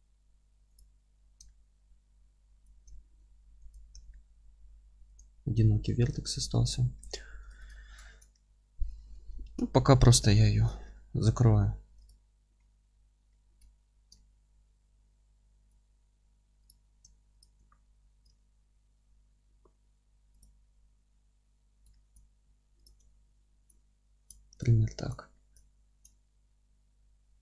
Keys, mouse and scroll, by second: 0.7 Delete, 3.7 click, 3.9 ctrl+x, 4.1-7.4 middle drag, 4.4-5.1 scroll up 1, 5.1 Delete, 5.7 Tab, 6.4 Tab, 6.9 2, 7.6 click, 8.0-10.8 alt+middle drag, 8.3 f, 8.9 Tab, 9.7-10.1 scroll down 2, 10.4 alt+z, 10.9-12.0 middle drag, 12.0 click, 12.4 F3, 13.3-16.6 middle drag, 13.6 alt+z, 15.7-16.2 scroll up 2, 16.2 1, 16.6 click, 17.8 f, 18.3-20.4 alt+middle drag, 20.4 click, 21.9-22.8 alt+middle drag, 22.8 ctrl+click, 23.2 f, 23.7-24.6 alt+middle drag, 24.6 click, 24.8 scroll down 1, 25.0-27.4 alt+middle drag, 25.6 Tab.